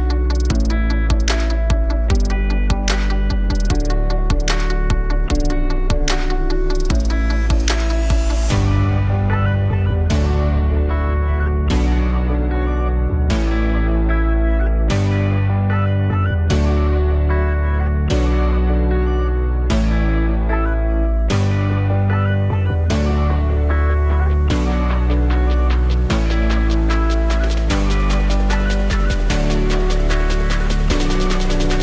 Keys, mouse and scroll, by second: 0.5 scroll down 1, 0.7-1.0 alt+middle drag, 1.0-2.0 alt+drag, 2.5 alt+click, 3.3 KP_1, 4.2 click, 4.7 shift+a, 9.5 scroll, 9.8 alt+middle click, 10.4 scroll, 12.5 Delete, 12.9-13.5 scroll down 9, 13.5 alt+middle drag, 13.8-14.2 scroll up 4, 14.2 shift+a, 17.1-19.7 drag, 24.1 scroll, 24.9 alt+middle click, 25.2-25.9 scroll up 2, 25.9 g, 28.2 Tab, 29.3 s.